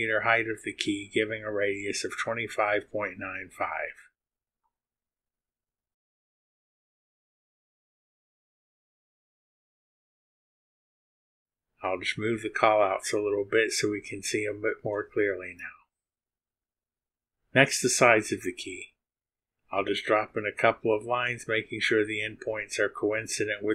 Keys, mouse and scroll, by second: 0.1 click, 0.9 click, 4.6 click, 5.5 click, 5.8 click, 7.4 click, 7.7 click, 8.7 click, 9.4-10.6 typing, 11.2 KP_Enter, 12.4 right click, 13.3 click, 14.3 click, 18.0 click, 22.1 click.